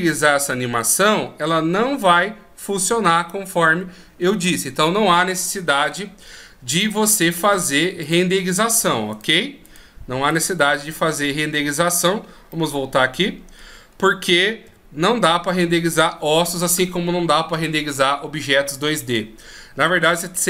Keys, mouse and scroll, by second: 8.3 click, 9.4 right click, 12.8 middle click, 14.1-14.9 scroll up 1, 14.9-16.0 scroll up 2, 14.9 KP_1.